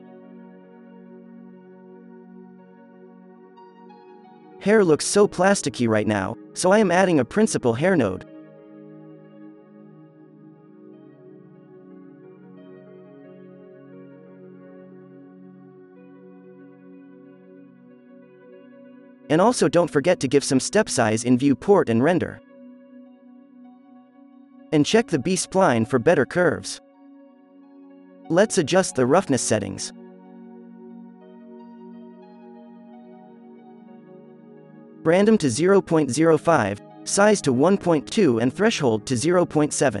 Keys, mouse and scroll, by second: 0.0 click, 2.7 alt+a, 2.7 click, 3.5 shift+a, 6.9 Down, 7.3 drag, 8.2-8.5 drag, 12.0-14.2 drag, 14.5 click, 16.2 alt+a, 18.2-18.5 drag, 18.8-20.2 middle drag, 21.0 click, 21.7 click, 22.4-24.1 drag, 24.4-25.1 drag, 25.2-27.4 drag, 27.4 ctrl+s, 28.1-30.3 drag, 31.5-33.0 drag, 33.5 click, 35.1 drag, 35.4-36.7 drag, 36.8-38.0 drag, 39.4-40.0 drag.